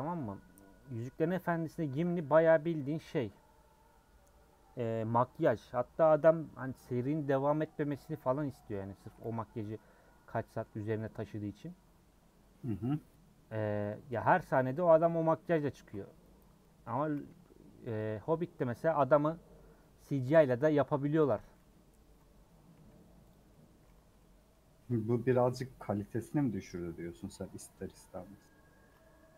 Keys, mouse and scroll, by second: 0.0 u, 0.5 scroll down 1, 0.6 middle click, 1.0 scroll up 2, 1.5 middle click, 1.9 a, 3.3 u, 7.9 scroll up 2, 8.1-9.7 middle drag, 9.7 alt+click, 10.3 middle click, 11.2 scroll up 1, 13.9 click, 14.2-15.9 middle drag, 15.9 ctrl+click, 16.6 middle click, 17.0 a, 18.4 u, 19.1-21.3 middle drag, 21.3 click, 21.5 middle click, 22.4 scroll down 1, 22.7 a, 23.3 click, 23.5 middle click, 23.9 Tab, 24.2 middle click, 24.7 Tab, 25.0-27.9 middle drag.